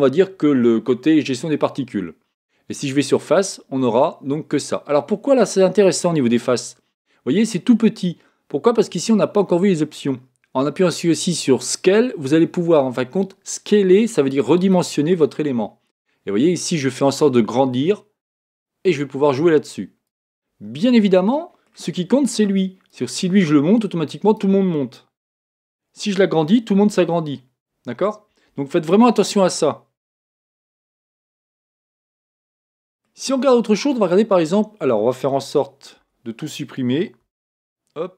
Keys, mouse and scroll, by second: 3.0 click, 3.8-5.7 middle drag, 6.3 scroll up 2, 6.6-9.5 middle drag, 8.0-9.3 scroll down 1, 9.3-10.0 scroll down 1, 11.6 click, 14.7 click, 20.8-22.7 middle drag, 22.9 click, 25.5 super+z, 26.9 s, 28.1 middle click, 29.6-30.9 scroll up 1, 30.9 middle click, 31.1 scroll down 1, 31.4-32.2 scroll up 1, 32.2-34.1 middle drag, 36.0 Tab, 37.3 x.